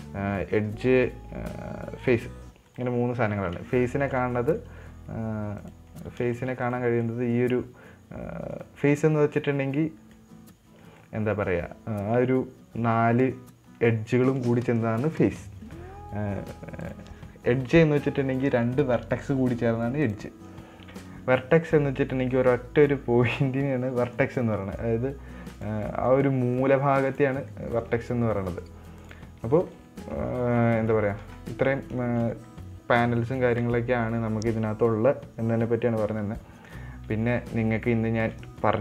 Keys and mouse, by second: 0.1 click, 1.3 right click, 2.3 click, 3.1 right click, 3.7 middle click, 4.3 shift+middle click, 4.6 middle click, 6.0 click, 6.7 shift+middle click, 7.0 right click, 7.4 middle click, 8.9 right click, 10.5 middle click, 17.2 click, 18.8 right click, 20.4 click, 22.6-24.6 right drag, 25.1 right click, 26.3 middle click, 27.0 right click, 27.9 middle click, 28.6 middle click, 29.0 right click, 30.1 middle click, 30.8 shift+middle click, 32.4 shift+middle click.